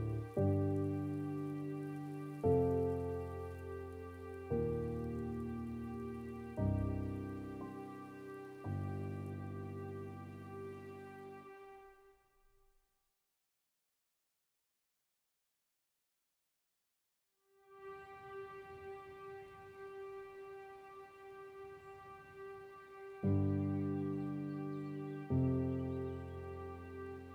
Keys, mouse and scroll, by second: 5.2 scroll down 2, 5.5 middle click, 6.3 scroll up 3, 6.7-9.8 middle drag, 9.8 scroll up 2, 10.1-11.5 middle drag, 11.5-12.2 scroll up 1, 12.2 ctrl+r, 15.3 scroll down 2, 15.5 Tab, 16.0-18.1 middle drag, 20.0-22.5 drag, 22.5-23.8 middle drag, 23.8-24.1 scroll down 3, 24.1-25.9 middle drag, 25.9-26.3 scroll up 2, 26.3-26.7 scroll down 3.